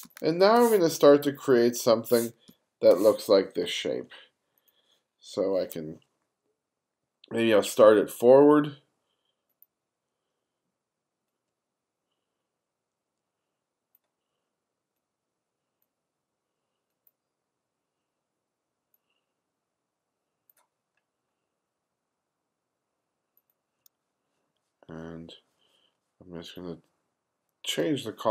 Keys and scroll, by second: 0.1 space, 2.5 space.